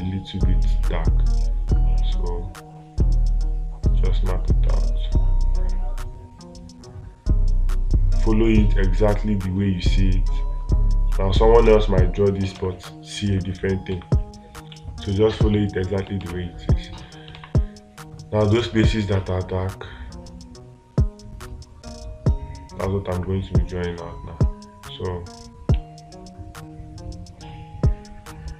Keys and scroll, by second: 13.0 space, 16.7 space.